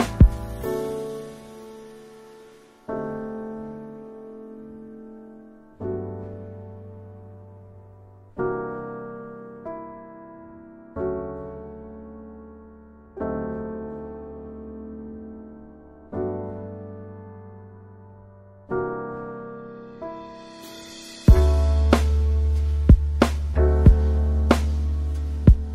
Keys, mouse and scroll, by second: 0.6 click, 7.4 alt+BackSpace, 16.5 scroll down 2, 18.0-21.5 drag, 22.0-24.7 scroll down 2, 25.2-25.7 scroll down 2.